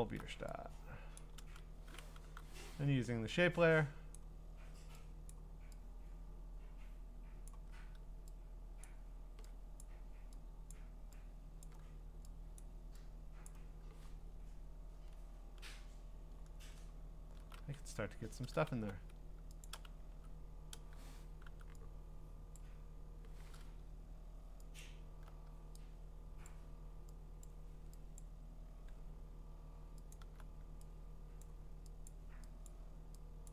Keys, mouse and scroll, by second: 1.2 click, 1.2 scroll, 1.4 ctrl+z, 2.2 u, 4.1 click, 5.3 click, 7.4 click, 8.8 click, 9.8 click, 10.7 click, 11.6 click, 12.6 click, 13.5 click, 14.1-16.6 ctrl+scroll, 18.1-18.7 scroll, 18.7 b, 19.6 alt+click, 20.1 x, 21.4 u, 22.5 click, 24.8 alt+click, 26.5 click, 27.4 click, 28.2 click, 28.3 alt+click, 30.1 alt+click, 30.2 alt+click, 31.4 click, 32.1 click, 32.6 alt+click, 33.4 click, 33.4 alt+click.